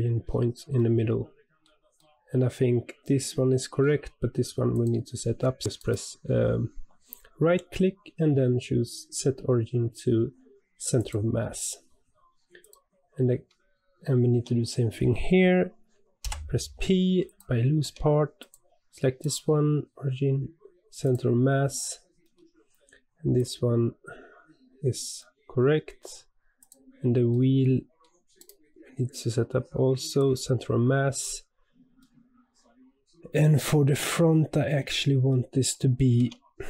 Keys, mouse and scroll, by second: 4.7 click, 5.7-12.6 right drag, 12.6 click, 14.3 Tab, 16.2 p, 17.8 Tab, 18.3 click, 19.2-22.2 right drag, 22.2-23.3 middle drag, 23.3 click, 25.1-26.5 middle drag, 26.5 click, 27.2 scroll down 1, 27.3-28.3 middle drag, 28.3-31.2 right drag, 31.2 click, 32.0-34.3 middle drag, 34.3-34.8 scroll up 2, 34.8-35.5 shift+middle drag, 35.5-36.1 scroll up 1, 36.1 Tab.